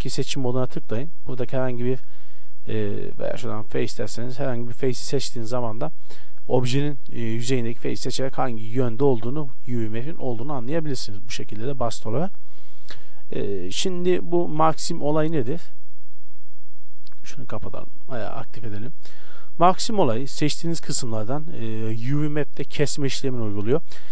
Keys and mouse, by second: 0.5-1.3 drag, 1.3-2.3 middle drag, 2.3-3.5 drag, 4.1-5.7 middle drag, 5.7-14.4 drag, 14.4 Tab, 15.1 Tab, 15.5 a, 16.0 a, 16.4 a, 17.3-20.3 drag, 17.8 a, 23.5 middle click.